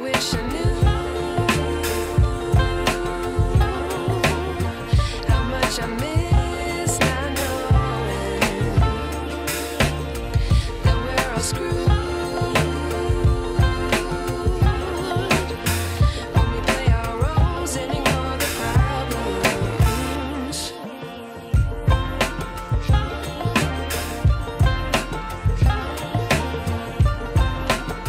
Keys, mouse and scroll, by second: 1.2-1.9 drag, 9.4 scroll down 3, 10.7-12.5 drag, 12.5 scroll up 3, 13.4 scroll up 1, 13.7-14.7 shift+middle drag, 14.7-19.4 drag, 22.6-28.0 drag, 26.4 Left, 27.3 Left.